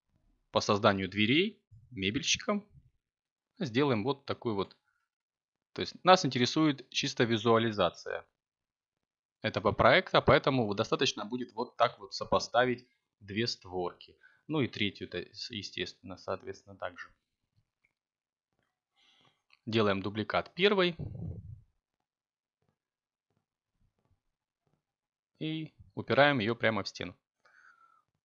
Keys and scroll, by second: 0.3 a, 10.8 y, 17.3 g, 18.0 y, 20.3 a.